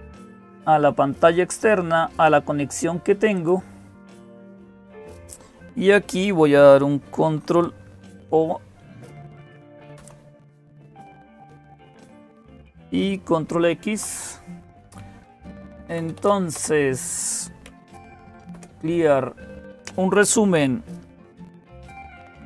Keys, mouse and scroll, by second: 0.0-22.4 typing, 0.2 click, 3.2-5.1 drag, 8.9 ctrl+o, 9.8 Return, 13.3 ctrl+x.